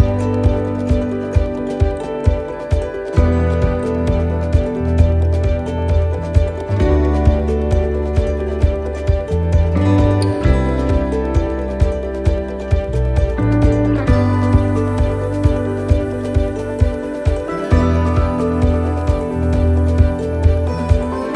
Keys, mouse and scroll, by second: 0.7 c, 7.7 middle click, 7.7 x, 8.1-8.8 scroll up 2, 8.9 right click, 9.6 alt+shift+right click, 10.6 right click, 11.1 alt+shift+right click, 12.5 f, 13.4 right click, 14.1 right click, 15.2 f, 15.5 middle click, 15.8-16.1 scroll down 2, 16.2 shift+middle click, 16.6-16.9 scroll up 2, 16.9 middle click, 17.4-18.0 scroll down 3, 19.9 middle click.